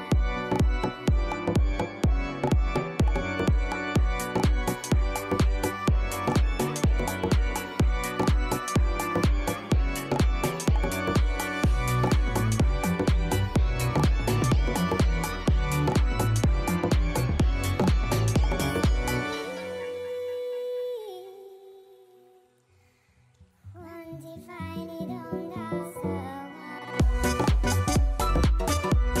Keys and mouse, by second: 3.1 click, 3.8 ctrl+z, 4.8 click, 5.5-6.5 alt+drag, 7.2-9.1 alt+drag, 9.4 alt+right click, 9.5-10.7 alt+drag, 10.8 alt+right click, 11.0 alt+click, 11.2 alt+middle click, 11.3 alt+right click, 12.0 alt+click, 13.0 alt+right click, 13.2 alt+middle click, 13.3 alt+click, 16.5 click, 18.4 click, 18.7 click, 19.9 click, 22.4 click, 23.4 click, 24.2 click.